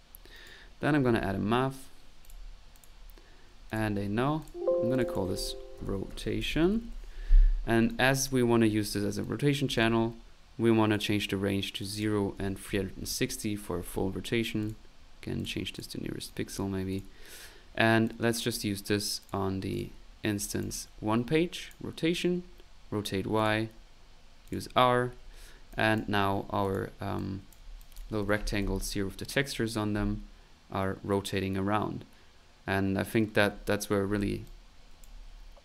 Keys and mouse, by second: 0.0-1.5 typing, 0.3 right click, 2.2 click, 2.7 click, 3.6 alt+click, 3.7-4.4 typing, 4.4-5.5 alt+drag, 7.9 click, 9.2 click, 10.9 click, 11.8 click, 14.6 click, 15.4 click, 15.7 click, 16.3 click, 16.9 click, 18.0 click, 19.2 click, 19.7 click, 20.0 click, 20.3-20.8 typing, 20.4-21.9 drag, 23.4 click, 24.4 click, 25.6 middle click, 25.7 click, 26.6 click, 27.2 click, 27.8 click, 28.3 p, 28.6 click, 34.4 click.